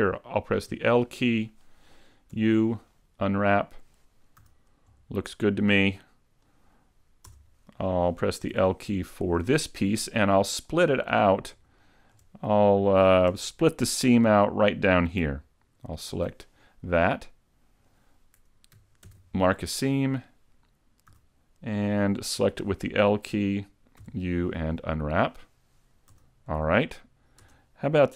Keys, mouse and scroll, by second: 0.7 l, 2.3 u, 4.5 a, 4.9 Tab, 6.5 right click, 7.3 Tab, 8.5 l, 10.1 middle click, 11.1-11.7 scroll up 3, 11.9 shift+middle click, 13.4 a, 16.0 alt+right click, 16.9 middle click, 19.1 ctrl+e, 21.1 a, 22.5 l, 24.0 u, 26.2 a, 26.6 scroll down 2, 27.0 middle click, 27.2 Tab, 27.5 Tab.